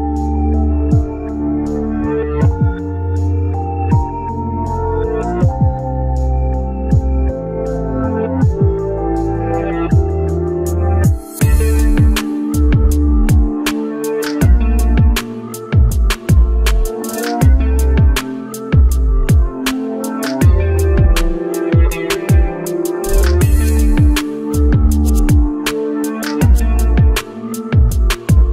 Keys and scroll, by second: 0.2 ctrl+z, 10.3 ctrl+z.